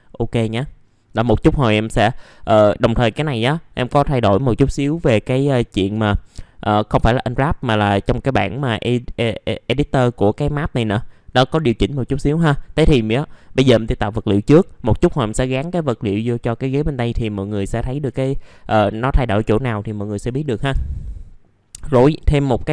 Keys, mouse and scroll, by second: 1.0-1.5 scroll up 1, 1.7 middle click, 12.8-13.1 scroll down 1.